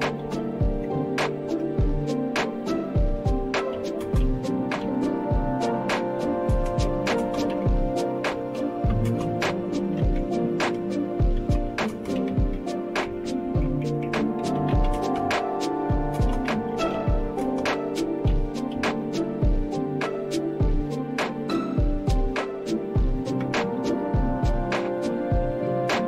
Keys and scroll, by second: 0.0-1.1 typing, 1.4 Return, 3.5-4.8 typing, 6.0-19.5 typing, 23.4 Return.